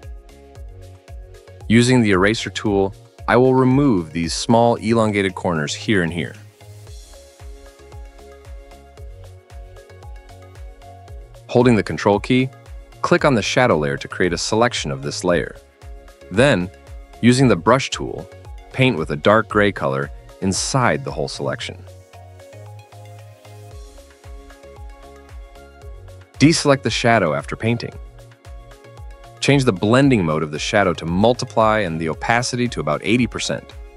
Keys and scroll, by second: 8.0-9.2 typing, 19.2 ], 21.1-22.8 typing, 22.9 Return, 26.7 ctrl+d.